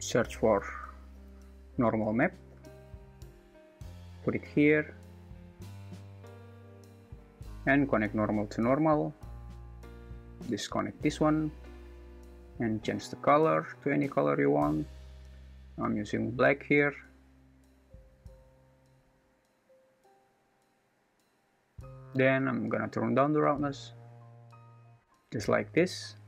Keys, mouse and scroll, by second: 8.1-9.9 drag, 11.0 click, 11.3 click, 18.5 click, 22.8-25.0 drag.